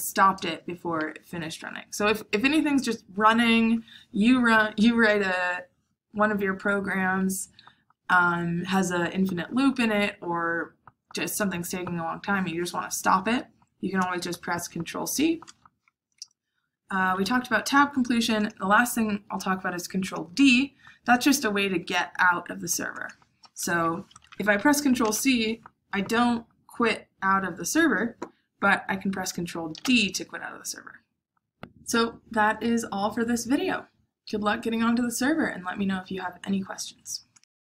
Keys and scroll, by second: 25.0 ctrl+c, 29.6 ctrl+d.